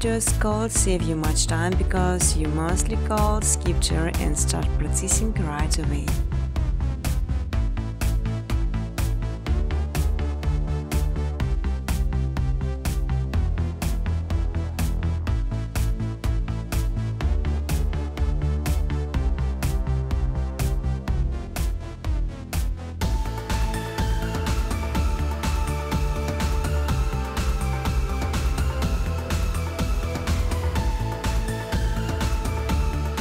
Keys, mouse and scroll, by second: 1.3 click, 5.4 click, 6.6 click, 7.6 click, 8.6 click, 9.4 click, 11.2-12.6 typing, 13.7 click, 14.6 space, 15.7-17.6 typing, 18.6 click, 22.8 click, 24.9 click, 25.9 click, 26.7 click, 32.5 click.